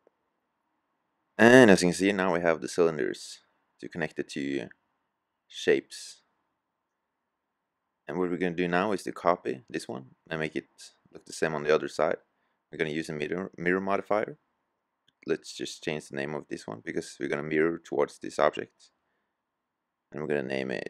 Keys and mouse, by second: 0.6 click, 1.0 middle click, 10.5 typing, 14.0-18.1 middle drag, 18.1-20.2 drag.